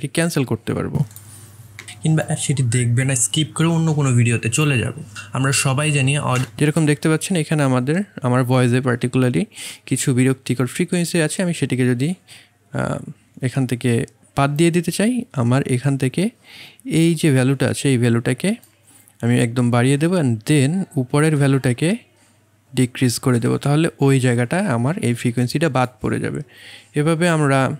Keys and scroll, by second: 1.8 space, 6.4 space.